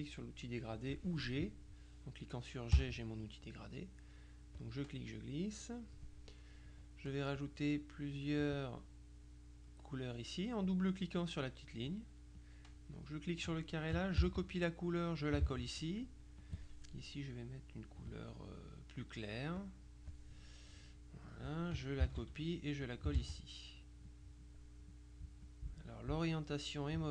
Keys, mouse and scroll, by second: 0.8 click, 2.8 g, 4.7-6.5 drag, 7.5 click, 8.5 click, 12.5 click, 14.3 ctrl+c, 15.0 click, 15.5 ctrl+v, 16.5 click, 19.7 click, 21.4 click, 22.1 ctrl+c, 22.9 ctrl+click, 23.5 ctrl+v, 24.2 click, 25.5 click.